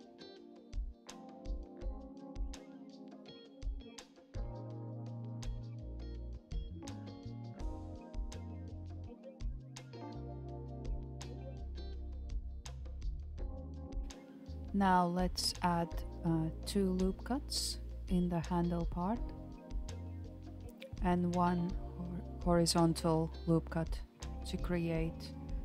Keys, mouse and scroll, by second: 0.9 KP_1, 2.1 g, 6.4 middle click, 7.1 click, 8.3 KP_1, 9.0 g, 14.0 g, 15.6 ctrl+r, 20.8-23.8 shift+middle drag, 23.9 ctrl+r.